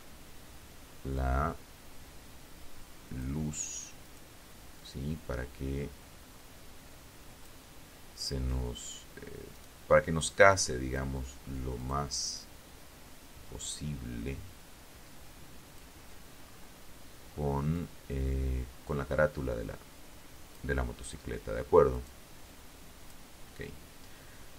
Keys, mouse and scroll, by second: 2.2 right click, 2.9-5.8 drag, 7.7 right click, 8.4 click, 9.9 right click, 10.5-14.1 drag, 14.6-15.0 scroll up 1, 15.9-18.9 drag, 20.0 right click, 20.6 click, 23.0 KP_1, 23.7-24.3 scroll down 2.